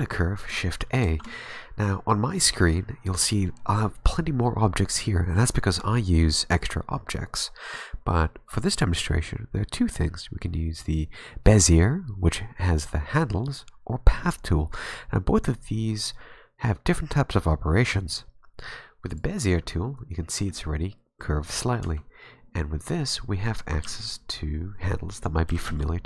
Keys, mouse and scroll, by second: 1.0 shift+a, 1.1 shift+a, 19.6-20.0 scroll up 2, 19.8 middle click, 21.9 Tab, 23.4 right click, 23.8 g, 25.5 g.